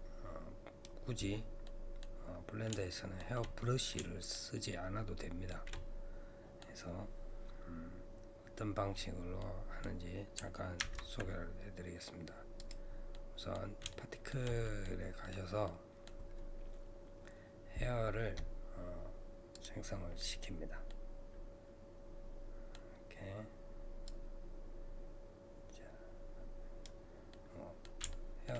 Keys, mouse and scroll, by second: 1.7 middle click, 2.3-2.9 scroll up 2, 2.9-10.8 shift+middle drag, 10.8 ctrl+Tab, 13.1-14.8 middle drag, 14.8-15.6 scroll up 2, 15.2 middle click, 15.6-18.7 middle drag, 19.5-20.9 drag, 20.9-23.9 middle drag, 24.1-27.3 drag, 27.3-28.5 middle drag.